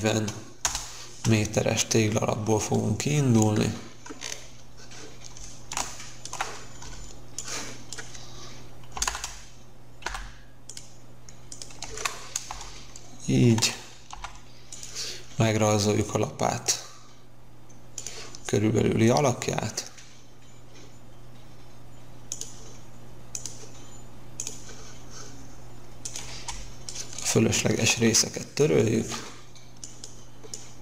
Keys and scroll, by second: 0.7 Return, 6.7 space, 8.9 m, 9.0 space, 10.1 m, 11.7 Escape, 12.4 space, 14.0 l, 26.3 space, 27.9 Delete.